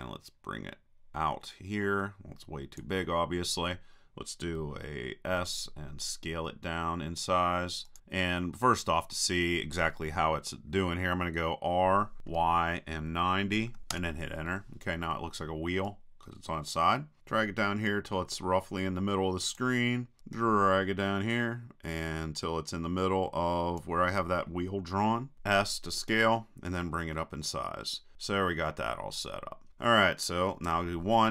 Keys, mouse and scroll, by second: 0.1-2.1 drag, 5.4 s, 8.0-9.7 drag, 12.2 r, 15.9-17.2 drag, 20.4-22.3 drag, 25.3 s, 28.1-29.7 drag, 30.7 KP_1.